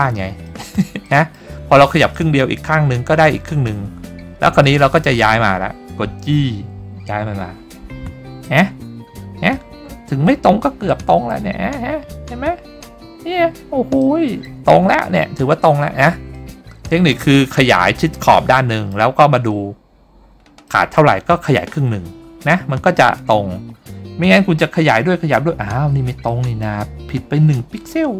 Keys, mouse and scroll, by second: 0.6 middle click, 1.2 middle click, 2.3 middle click, 2.9-3.2 scroll up 2, 3.8-4.8 scroll up 2, 4.8 middle click, 5.5 scroll down 1, 6.5 g, 8.6 click, 10.2-11.0 scroll up 3, 11.0 middle click, 11.9-12.3 scroll up 1, 12.5-13.3 scroll up 1, 13.3 scroll up 2, 14.1 middle click, 15.3 scroll down 2, 16.5 middle click, 18.7 middle click, 19.6-19.9 scroll up 2, 20.8 scroll down 1, 20.8 middle click, 22.3-22.9 scroll up 4, 23.2 middle click, 23.9-24.4 scroll up 2, 25.0 scroll up 1, 25.6-25.9 scroll down 2, 26.0 scroll up 1, 26.4 middle click, 27.2 scroll up 1.